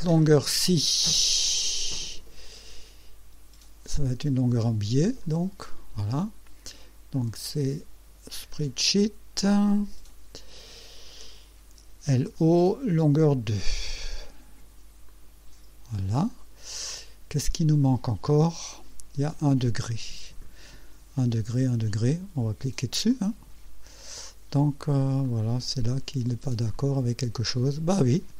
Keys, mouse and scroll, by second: 5.2 click, 7.2 click, 8.4 s, 9.6 click, 11.7-12.7 typing, 13.3 click, 14.0 click, 15.1 click, 16.3 scroll down 1, 16.8-17.6 right drag, 23.1 click, 24.8 scroll up 1, 25.2 right click, 26.7-28.3 drag.